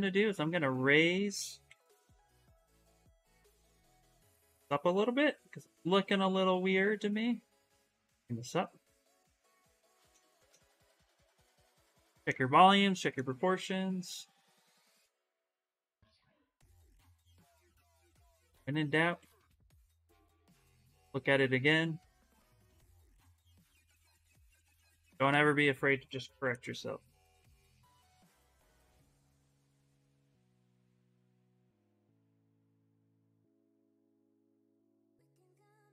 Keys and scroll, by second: 0.0-0.2 typing, 1.4 x, 5.9 s, 15.5 d, 15.9 d, 18.5 s, 23.6-26.1 typing, 30.1 ctrl+z, 30.4 ctrl+z, 31.4 x, 31.7 s.